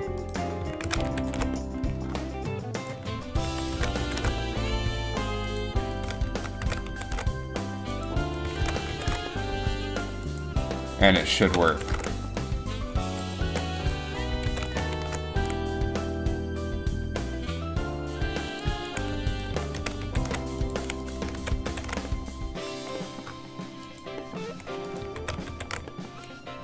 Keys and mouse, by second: 1.0 ctrl+c, 1.3 ctrl+shift+v, 3.9 ctrl+c, 4.2 ctrl+shift+v, 6.8 ctrl+c, 7.2 ctrl+shift+v, 8.7 ctrl+c, 9.2 ctrl+shift+v, 11.6 ctrl+c, 11.9 ctrl+shift+v, 14.8 ctrl+c, 15.1 ctrl+shift+v, 19.3 click, 19.9 ctrl+c, 20.3 ctrl+shift+v, 21.5 ctrl+c, 21.9 ctrl+shift+v, 22.2 middle click, 25.0 right click, 25.4 ctrl+c, 25.7 ctrl+shift+v.